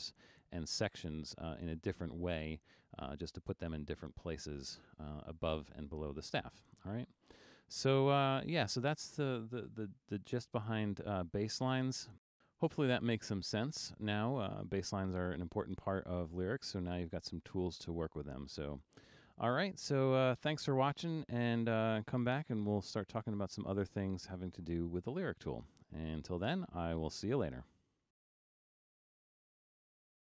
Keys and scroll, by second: 10.5 super+-, 11.0 super+-.